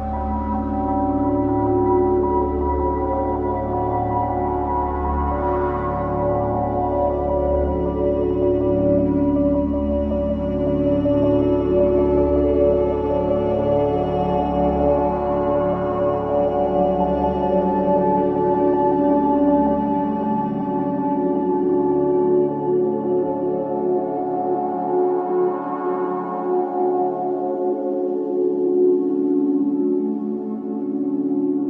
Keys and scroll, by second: 9.9 Delete, 18.8 ctrl+z, 23.4 Delete.